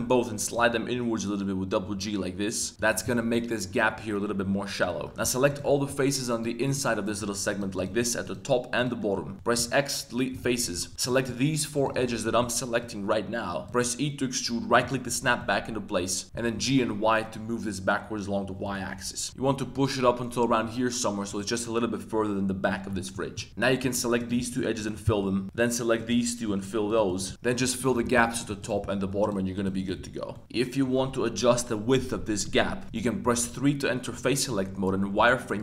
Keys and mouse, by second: 2.7 click, 3.1 middle click, 3.2 click, 3.2 right click, 5.1 click, 5.4 super+click, 6.3 shift+click, 6.6 shift+click, 9.0 shift+click, 9.5 x, 10.7 shift+click, 10.9 2, 12.0 shift+click, 13.7 e, 14.9 middle click, 15.2 z, 15.4 middle click, 16.3 g, 16.5 y, 18.6 click, 18.9 middle click, 19.3 g, 19.5 y, 21.3 click, 22.6 middle click, 23.0 shift+click, 23.4 middle click, 23.5 2, 23.8 shift+z, 24.1 shift+click, 24.4 f, 24.8 shift+middle click, 25.1 middle click, 25.9 shift+click, 26.8 shift+click, 27.2 f, 27.3 a, 27.5 click, 27.7 shift+click, 28.0 f, 28.3 click, 28.6 shift+click, 29.2 right click, 29.2 f, 29.5 right click, 29.7 shift+right click, 30.2 f, 30.3 middle click, 30.4 z, 34.2 z, 34.5 middle click, 35.1 b.